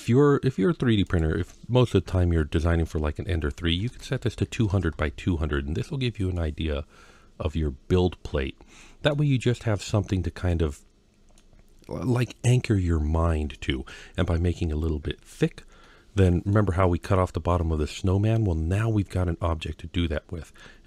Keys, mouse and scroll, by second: 0.9-4.8 drag, 3.7 KP_0, 4.5 KP_0, 5.5-5.9 scroll down 4, 6.2-8.9 middle drag, 9.4-10.1 scroll up 2, 10.3-11.2 middle drag, 13.4-14.0 middle drag, 15.7-16.3 middle drag.